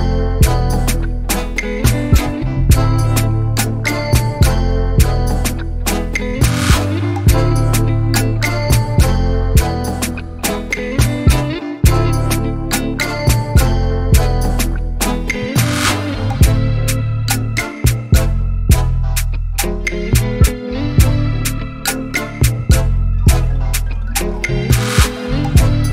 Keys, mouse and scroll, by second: 0.2 click, 2.7 click, 3.7-4.4 middle drag, 4.4-5.8 scroll up 2, 5.8-6.4 scroll up 1, 6.4-10.2 drag, 10.3-12.7 drag, 12.7-13.2 scroll up 1, 13.2-15.3 drag, 15.3 scroll down 2, 15.5-18.6 middle drag, 18.9-21.2 drag, 21.2-22.4 scroll up 1, 22.4-23.9 scroll down 4, 23.9-25.3 drag, 25.3-25.8 scroll up 4.